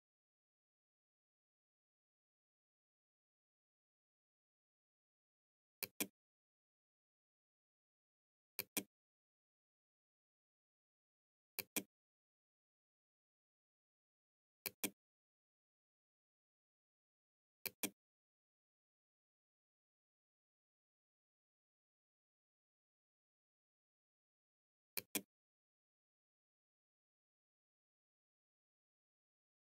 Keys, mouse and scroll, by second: 4.8 click, 7.6 click, 10.6 click, 13.7 click, 16.2-17.3 drag, 19.0 middle click, 24.1 click.